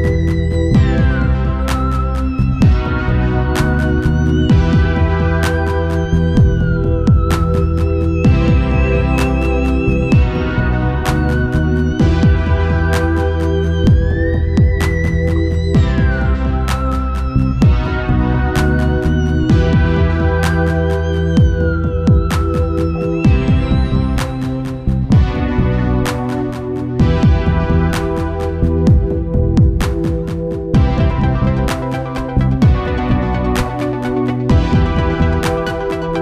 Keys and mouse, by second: 1.3-4.9 drag, 8.0 ctrl+s, 10.0-11.6 drag, 17.1-22.1 drag, 22.1 middle click, 23.7-25.3 drag, 30.9-32.7 drag, 33.5 ctrl+s.